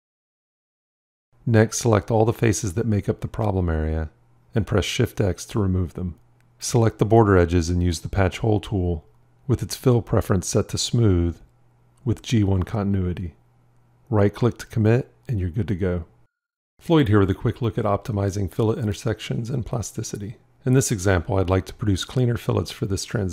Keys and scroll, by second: 3.8 shift+x.